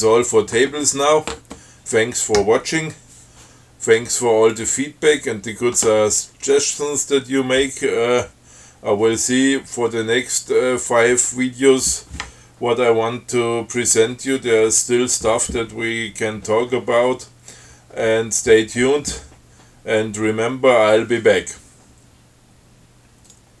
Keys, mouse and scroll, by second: 4.7 click.